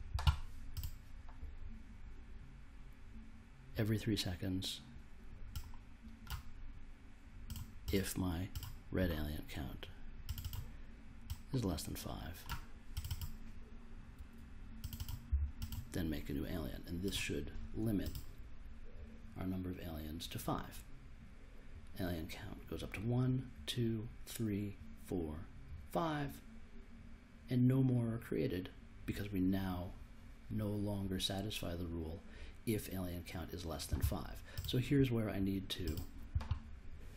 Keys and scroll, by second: 15.3 5.